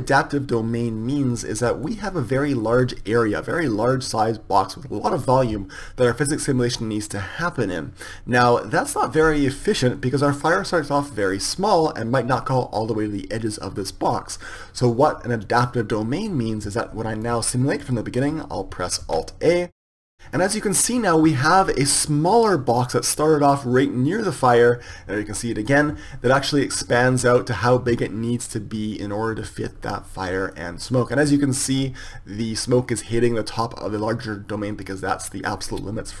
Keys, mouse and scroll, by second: 3.8-5.8 middle drag, 7.8-8.8 middle drag, 10.8 middle click, 17.8-20.4 drag.